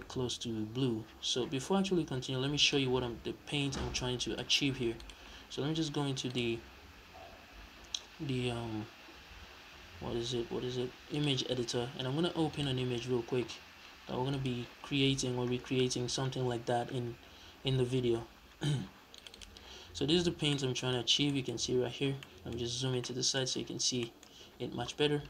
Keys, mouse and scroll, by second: 2.5-19.3 drag, 20.0 scroll down 1, 20.3-25.2 middle drag, 20.7-21.1 scroll down 2, 21.4-22.0 scroll up 2, 22.5-22.8 scroll up 2, 23.6 scroll down 2.